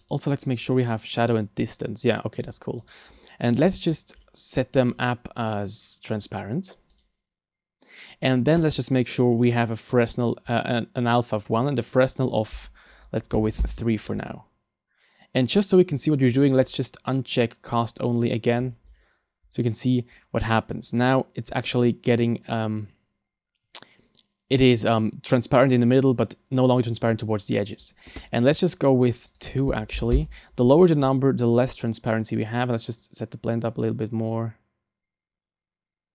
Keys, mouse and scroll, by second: 0.0 right click, 0.6-0.9 scroll down 4, 1.2 click, 2.8 right click, 3.6-4.3 scroll up 6, 4.3 scroll down 1, 4.8-5.8 scroll down 4, 6.2 click, 7.0 right click, 11.8 click, 16.4-18.0 scroll down 6, 18.0 click, 18.7-19.6 scroll up 5, 29.3 click, 33.0 click.